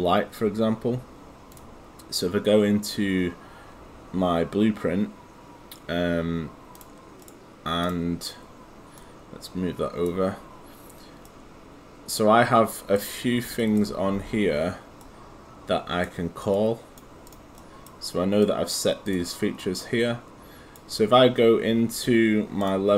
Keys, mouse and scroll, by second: 6.8 click, 7.2 right click, 7.8 click, 11.3 right click, 16.6 click, 17.6 right click, 18.4 click, 19.6 right click, 22.6 click.